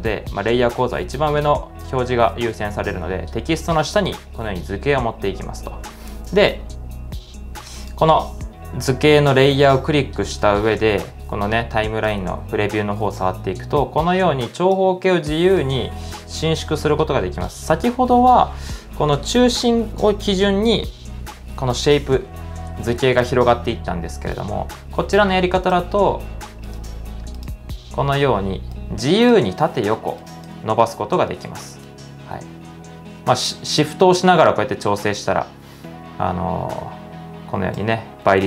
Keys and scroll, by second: 5.8-6.6 typing, 12.3 super+z.